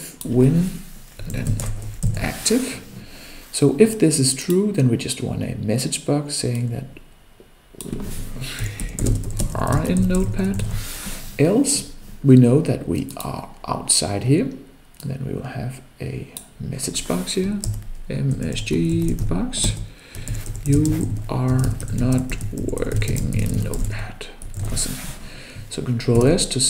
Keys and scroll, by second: 26.4 ctrl+s.